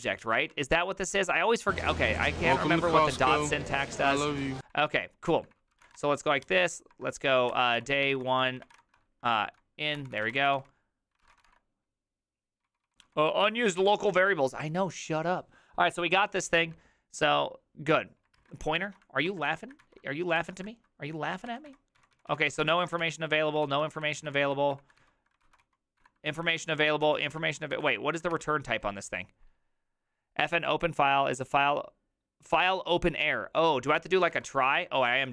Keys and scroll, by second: 0.0-13.7 typing, 10.0 ctrl+c, 14.9 typing, 18.4 alt+{, 18.6-28.8 typing, 20.4 ctrl+c, 23.6 ctrl+c, 34.3 ctrl+c, 35.1 ctrl+c.